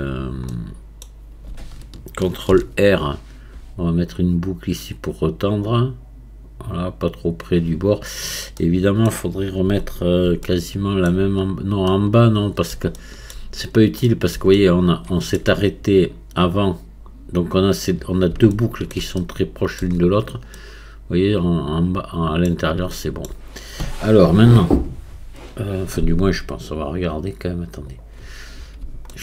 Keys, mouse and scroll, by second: 0.0-0.5 scroll up 1, 0.5-2.5 middle drag, 2.5 ctrl+r, 8.2-8.6 scroll down 1, 8.6-11.4 middle drag, 11.4-11.8 scroll up 2, 11.8-13.7 middle drag, 13.7-14.0 scroll up 2, 14.0-17.6 middle drag, 18.0 scroll down 2, 18.5-19.8 shift+middle drag, 19.8 Tab, 20.4 scroll up 1, 20.5-22.5 middle drag, 22.5-22.9 scroll down 4, 22.9 shift+middle click, 23.5-26.6 scroll up 2, 27.8 click, 28.6-29.1 scroll up 3, 29.1-29.2 shift+middle drag.